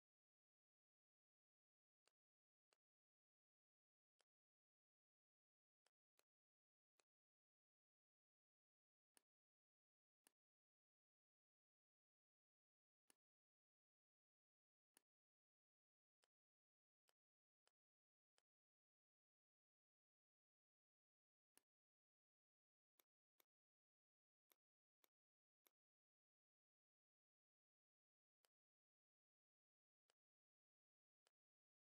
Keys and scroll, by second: 0.2 shift+x, 1.7 v, 2.5 space, 3.4 m, 11.4 l, 14.3 v, 26.1 p.